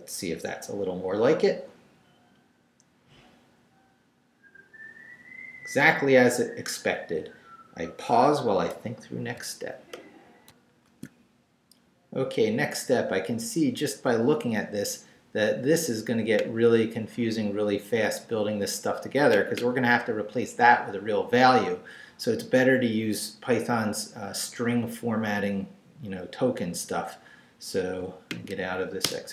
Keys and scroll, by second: 10.5 alt+shift+super+z, 29.0 Return.